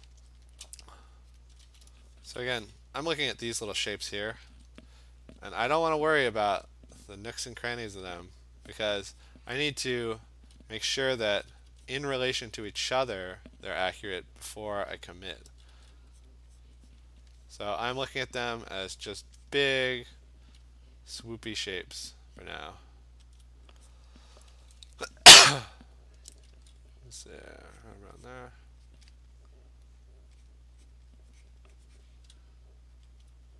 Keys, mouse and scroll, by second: 0.6 click, 1.4 click, 1.8 click, 2.2 [, 2.4 [, 4.5 ], 6.1 click, 6.2 ], 7.1 click, 7.9 click, 8.1 ], 8.5 click, 8.8 click, 9.3 click, 11.1 alt+click, 11.1 alt+click, 11.4 ], 11.6 ], 11.7 ], 12.1 click, 12.4 click, 13.2 alt+click, 14.9 click, 15.1 click, 15.5 [, 15.8 [, 16.3 click, 16.7 click, 17.1 click, 17.3 alt+click, 19.3 click, 19.6 click, 19.7 click, 20.0 click, 20.5 click, 22.1 alt+click, 22.2 alt+click, 23.4 alt+click, 24.0 click, 24.3 ], 24.6 ], 24.8 ], 26.0 click, 26.3 [, 26.6 [, 27.9 click, 28.4 click, 28.5 alt+click, 29.0 click, 29.2 click, 29.4 click, 30.5 click, 31.0 click, 31.2 click, 31.6 click, 32.1 click, 33.3 alt+click.